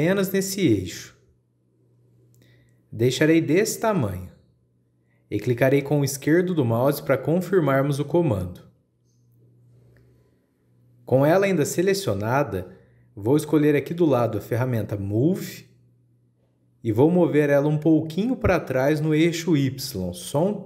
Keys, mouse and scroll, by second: 9.0-12.1 middle drag, 12.1-12.6 scroll up 1, 12.6-15.6 shift+middle drag, 16.3-19.3 drag, 20.1 click.